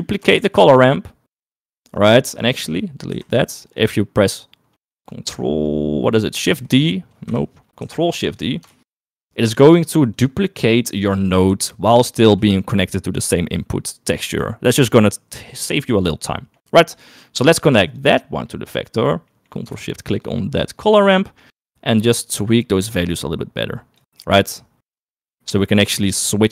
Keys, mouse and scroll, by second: 0.0 click, 0.6 shift+d, 3.3 typing, 3.8 click, 6.5 shift+d, 7.9 typing, 8.3 click, 8.9 ctrl+shift+d, 10.5 middle click, 16.1 middle click, 17.2 middle click, 18.0-19.1 drag, 20.2 ctrl+shift+click, 21.9-24.1 drag, 24.5-26.5 drag.